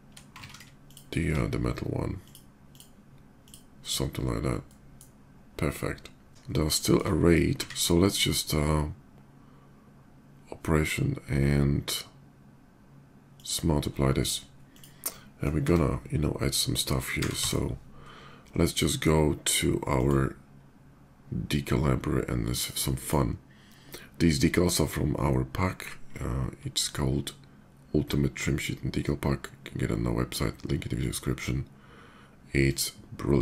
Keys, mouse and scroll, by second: 0.6 ctrl+shift+z, 0.6-1.1 shift+drag, 2.0 shift+click, 2.3 shift+click, 3.2 shift+click, 4.4-4.7 middle drag, 6.3 Tab, 6.5 shift+middle click, 7.4 q, 12.9 click, 14.4 click, 14.8-16.1 middle drag, 16.1 d, 17.2 w, 19.7 click, 22.8 click, 30.8 click, 32.4 click.